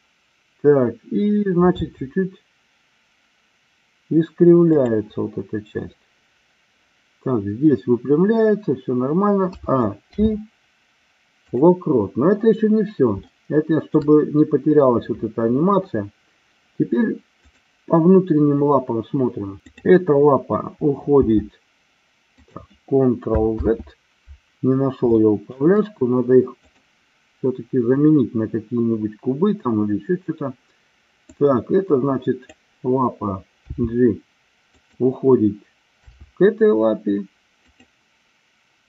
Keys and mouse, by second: 1.8 r, 9.4 a, 10.1 i, 13.3 shift+middle click, 17.4-18.5 drag, 19.7 click, 21.1 g, 22.5 click, 23.6 ctrl+z, 25.1-25.7 shift+middle drag, 26.6 click, 31.3-32.6 drag, 33.7 g, 34.8 click, 36.1 r, 37.7 click.